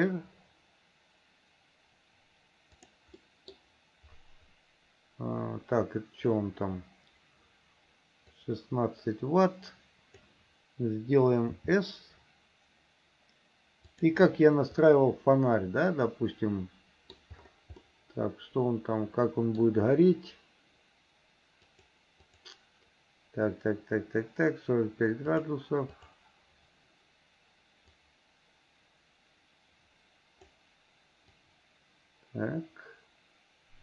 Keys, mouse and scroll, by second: 3.2 middle click, 8.4-10.2 drag, 14.9-17.2 middle drag, 17.8-19.7 middle drag, 21.7 click, 22.3 click, 25.3 click, 26.0 click, 28.0-30.5 drag, 31.4-33.8 drag.